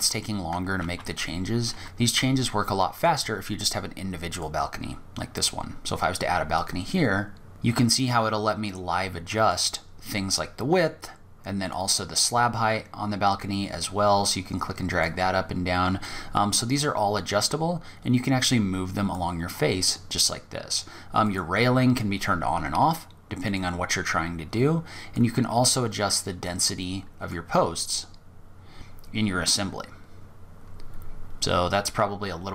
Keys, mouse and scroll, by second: 0.0 ctrl+z, 0.9 ctrl+z, 2.1 click, 2.6-3.5 scroll up 2, 3.5 click, 3.5 scroll up 1, 5.7 click, 10.9 click, 15.2 click, 20.4 click, 22.8 click, 24.3 click, 29.0-30.3 scroll up 12, 30.6-31.7 scroll down 3, 31.8 click.